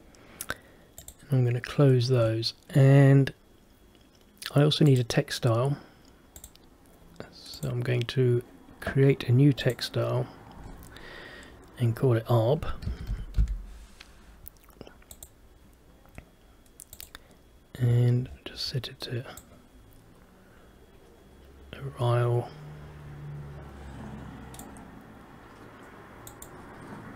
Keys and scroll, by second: 13.0 shift+a.